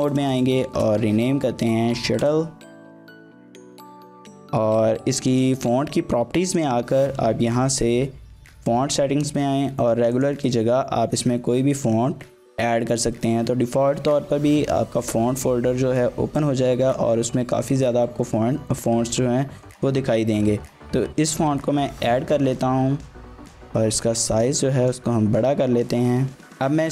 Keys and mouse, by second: 0.0-2.3 typing, 2.3 Return, 3.4 BackSpace, 3.9 Tab, 5.3 click, 6.1 g, 6.5 click, 8.6 click, 23.5-24.9 drag.